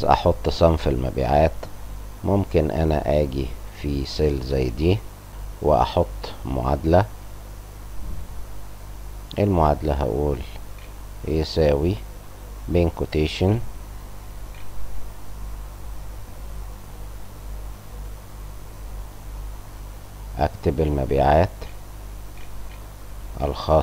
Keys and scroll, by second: 10.7 =, 13.8 shift+Up, 13.8 shift+', 14.5 shift+', 14.8 Return, 14.9 Print, 19.2-23.3 typing.